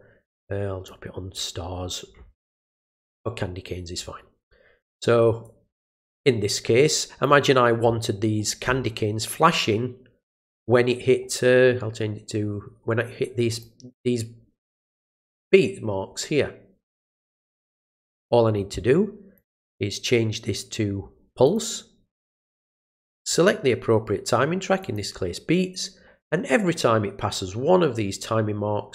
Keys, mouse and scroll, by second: 0.8 click, 5.4-7.2 drag, 13.5 click, 19.3 click, 21.4 click, 23.1 click, 24.8 click.